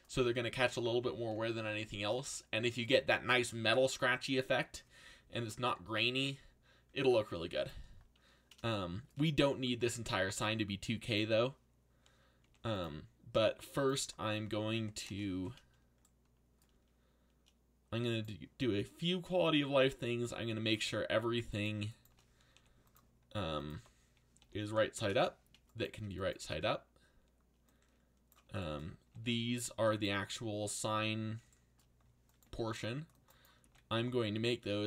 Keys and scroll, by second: 12.4 r, 13.8-15.2 typing, 22.5 r, 23.7 1, 24.4 7, 24.6 9, 24.9 Return, 28.8-29.7 typing, 32.4 c, 33.6 g.